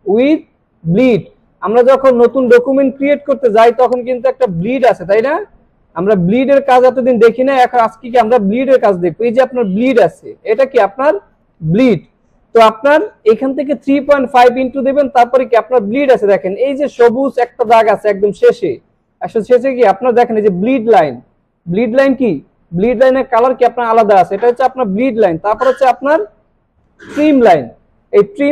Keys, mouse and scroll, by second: 2.2 click, 7.6-9.1 drag, 11.4 click.